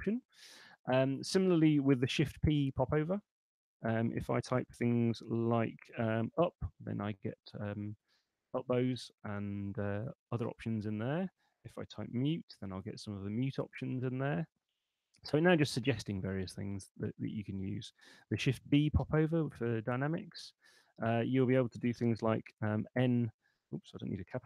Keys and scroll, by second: 2.4 shift+p, 6.3 Up, 11.7-13.0 typing, 16.1 BackSpace, 17.9 Escape, 18.9 shift+d, 22.5 shift+n, 24.1 BackSpace, 24.3 n.